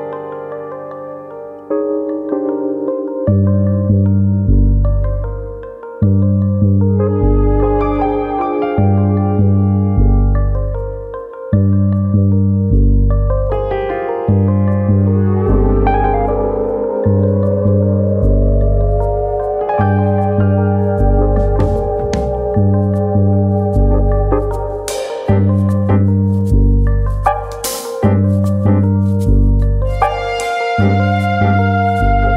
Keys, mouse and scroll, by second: 0.0 click, 0.3 click, 0.5 g, 1.4 click, 1.7 click, 1.9 g, 2.5 click, 3.1 click, 3.3 g, 3.9 click, 4.2 click, 4.4 g, 4.9 click, 5.1 middle click, 5.9 click, 6.5 click, 7.4 click, 7.4 middle click, 7.8 click, 8.5 click, 10.0 click, 10.5 click, 11.1 middle click, 11.7 click, 11.9 middle click, 12.4 click, 13.1 click, 13.4 middle click, 13.8 shift+middle click, 14.4 click, 15.3 middle click, 15.9 shift+middle click, 16.1 middle click, 16.7 alt+click, 17.0 middle click, 17.4 middle click, 17.7 shift+middle click, 17.7-18.6 scroll down 6, 17.8 Tab, 18.0 middle click, 18.6 middle click, 18.9-19.6 scroll up 7, 19.3 shift+middle click, 19.6 shift+middle click, 19.9 Tab, 20.2 middle click, 20.9 alt+click, 21.4 click, 22.0 shift+click, 22.2 middle click, 22.7 click, 23.5 middle click, 23.9 shift+middle click, 24.1 middle click, 24.6 click, 25.4 click, 25.6 middle click, 26.0 middle click, 26.0 shift+middle click, 26.5 click, 27.1 click, 27.3 middle click, 27.8 click, 28.6 middle click, 29.2-30.0 scroll down 4, 29.4 middle click, 29.5 Tab, 30.0 middle click, 30.6-31.0 scroll down 5, 31.0 middle click, 31.4 middle click, 31.7 scroll up 4, 32.3 click.